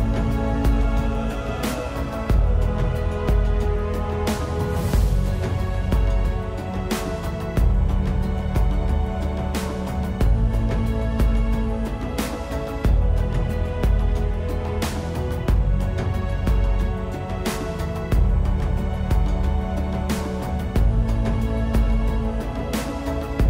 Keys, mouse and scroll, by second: 8.3 middle click, 10.9-11.3 scroll up 1, 11.8 Tab, 12.7 right click, 14.1 middle click, 17.7 click, 19.0 middle click, 21.7 click.